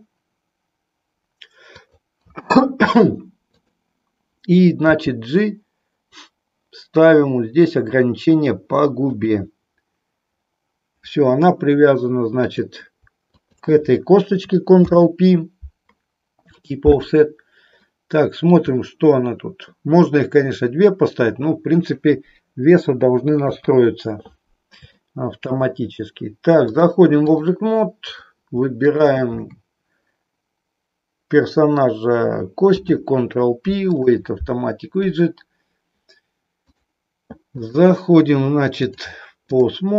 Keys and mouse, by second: 1.7 click, 3.5 click, 4.8 g, 12.3 click, 13.3 shift+click, 14.8 ctrl+p, 17.9 middle click, 23.4 KP_3, 24.9 shift+middle click, 26.7 click, 28.0 click, 28.9 shift+click, 32.5 ctrl+p, 37.7 click, 38.8-39.8 drag.